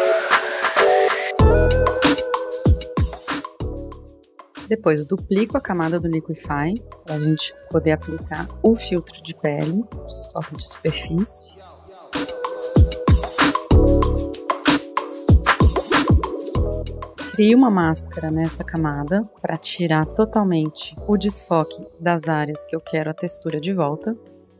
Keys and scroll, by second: 0.0-0.5 typing, 0.9 super+z, 2.1-2.5 typing, 5.9 super+j, 7.4-10.0 typing, 11.9 super+=, 11.9 super+=, 12.0-12.3 typing, 19.9 b, 24.2 [.